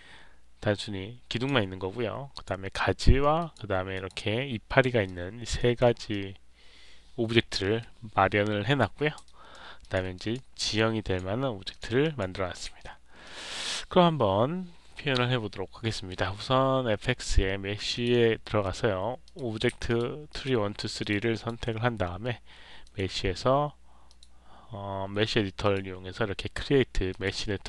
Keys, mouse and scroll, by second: 2.2 click, 3.3 click, 3.9 click, 5.0 alt+click, 5.5 alt+right click, 6.0-8.7 alt+drag, 9.2 alt+right click, 9.7 alt+click, 10.1 click, 10.7 alt+click, 11.6 click, 11.9 click, 13.1 click, 17.9 click, 19.2 click, 19.8 ctrl+click, 20.2 ctrl+click, 20.9 ctrl+click, 21.3 ctrl+click, 22.8 click, 24.0 click, 25.5 click, 27.0 click.